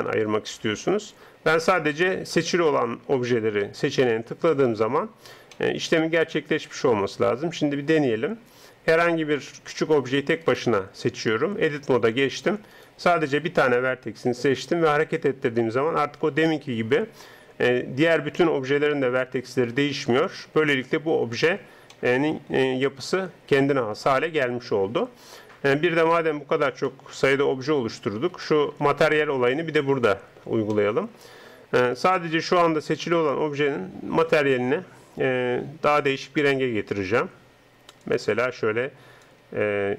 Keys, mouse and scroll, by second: 5.7-9.7 middle drag, 9.7-12.3 right drag, 11.7 Tab, 12.8 right click, 14.3 g, 20.8 Tab, 22.0 middle click, 24.4-26.2 middle drag, 27.1-28.7 middle drag, 30.2-34.4 middle drag, 34.4-39.9 drag.